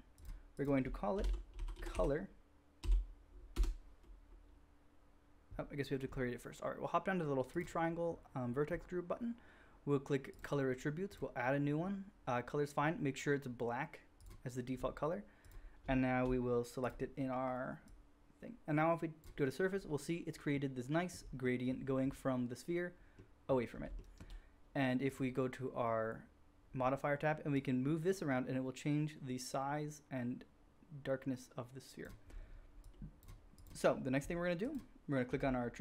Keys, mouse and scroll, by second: 0.2 middle click, 0.6 click, 1.2-7.6 drag, 7.6-10.2 middle drag, 10.2-15.9 drag, 16.2-24.0 drag, 24.2-25.2 drag, 25.2-27.6 middle drag, 27.6-34.1 drag, 34.1-34.6 middle drag, 34.6-35.8 drag, 35.2 g.